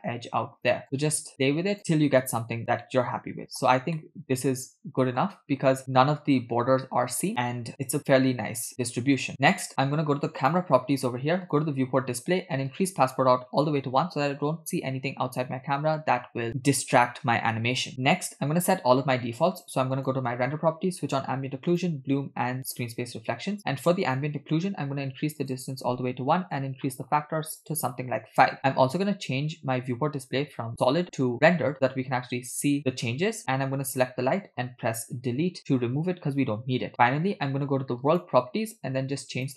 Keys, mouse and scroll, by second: 0.8-2.4 drag, 2.9-3.6 shift+middle drag, 4.0-5.2 ctrl+middle drag, 10.4 click, 11.5 click, 11.8-12.7 scroll down 2, 12.7-13.7 drag, 20.0 click, 21.1 click, 21.8 drag, 22.7 click, 24.0 click, 25.4-26.5 drag, 27.5-28.5 drag, 31.6 click, 33.8 click, 35.4 Delete, 38.0 click, 39.3 click.